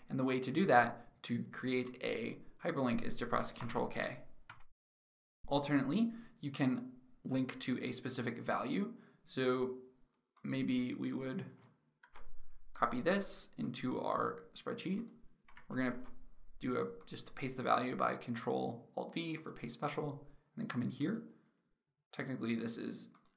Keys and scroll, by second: 3.3 ctrl+k, 11.6 ctrl+c, 17.1 ctrl+alt+v.